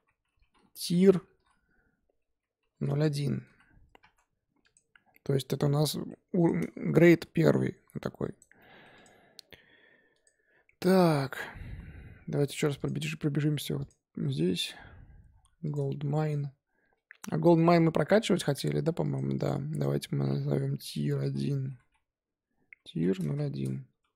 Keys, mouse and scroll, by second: 4.6 click, 5.0-5.6 scroll down 3, 5.6-6.3 middle drag, 6.3 click, 6.6 scroll up 2, 7.0 g, 8.6-8.9 middle drag, 8.9 click, 10.1-12.4 drag, 12.7 click, 14.7-15.0 scroll up 1, 15.3 scroll down 1, 15.6 click, 16.1-19.0 shift+middle drag, 19.0 click, 19.3-22.5 drag.